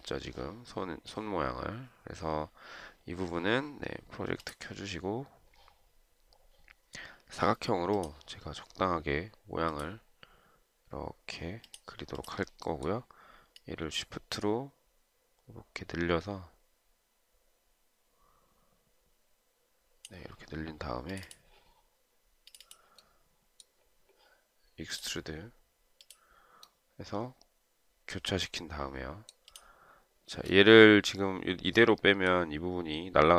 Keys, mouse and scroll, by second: 30.5 shift+scroll up 1.